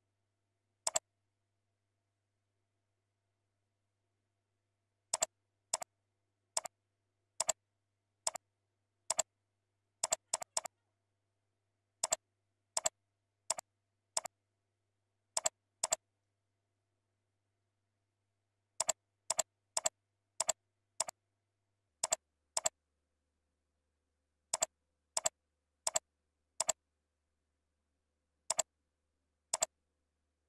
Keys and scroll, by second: 9.8 ctrl+z, 16.4 ctrl+Left, 17.6 ctrl+Up, 18.2 ctrl+Down, 30.3 ctrl+c.